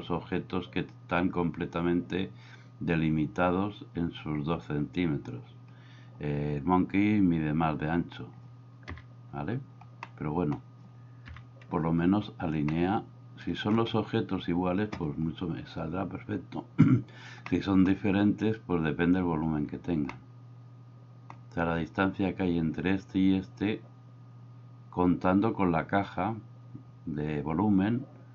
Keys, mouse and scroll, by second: 9.0 KP_7, 10.0-10.6 middle drag, 11.3 KP_1, 12.7-13.7 shift+middle drag, 17.5-17.9 middle drag, 20.1-21.3 middle drag.